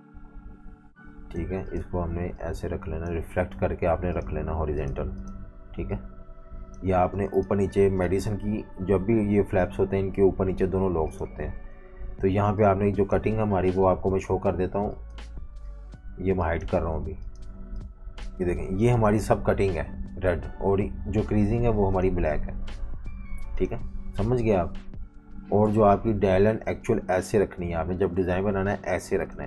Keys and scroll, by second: 5.4 typing, 6.8-7.8 typing, 11.7 super+y, 13.4 super+3, 15.2 super+3, 15.9 super+3, 16.9 super+3, 17.5 super+3, 18.3 super+3, 20.6 alt+super+3, 25.7 super+-, 25.8 super+-.